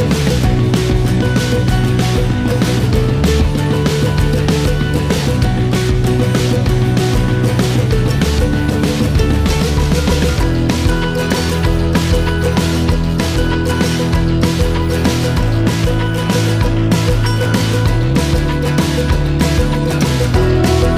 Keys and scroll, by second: 1.0 g, 13.1 typing, 13.7 Return, 18.7-19.1 typing, 20.1 Return.